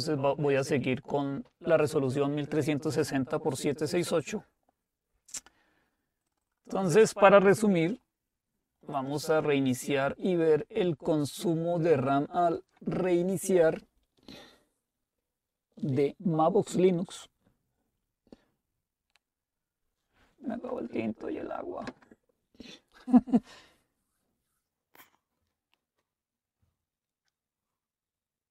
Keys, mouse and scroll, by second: 0.4 click, 6.3 click, 9.4 click, 10.2 click, 12.4 click.